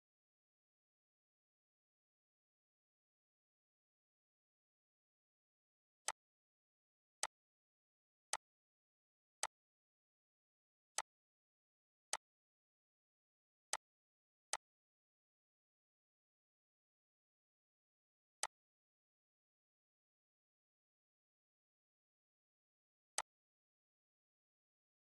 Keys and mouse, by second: 0.7 ctrl+v, 3.9 ctrl+v, 5.7-14.2 drag, 18.0-22.8 drag.